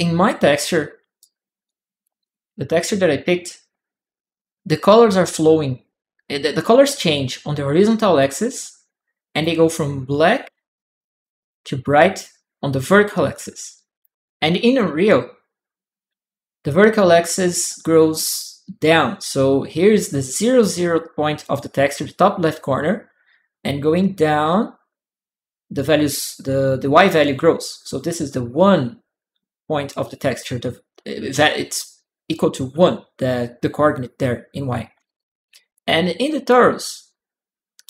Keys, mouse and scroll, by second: 0.3 click, 1.0 click, 1.4 click, 35.5 ctrl+click.